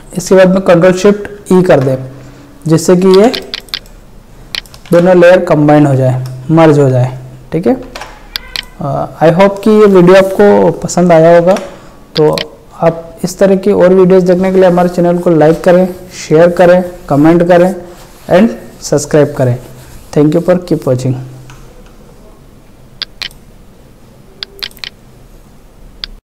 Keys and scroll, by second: 1.4 ctrl+shift+e, 4.9 ctrl+alt+z, 7.8 ctrl+w, 11.4 ctrl+w.